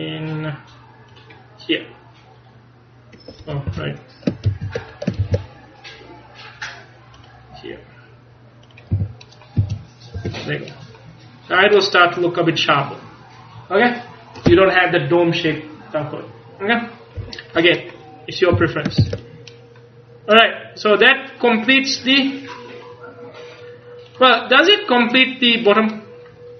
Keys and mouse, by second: 4.5 ctrl+z, 5.3 ctrl+r, 8.8-10.2 drag, 9.0 a, 9.7 z, 10.2 Tab, 18.6 a, 19.1 ctrl+s.